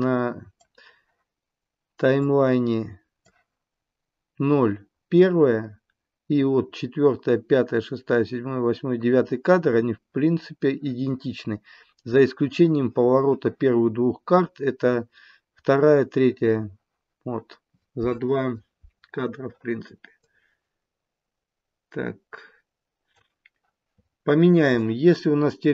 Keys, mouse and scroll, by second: 2.2 click, 20.2 click.